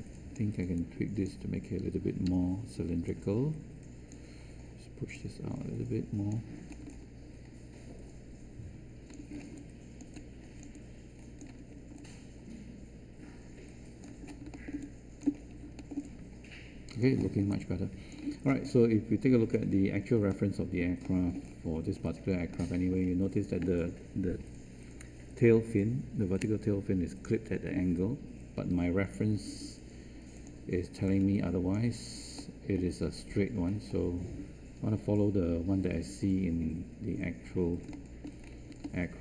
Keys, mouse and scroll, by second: 2.2 w, 30.9 space.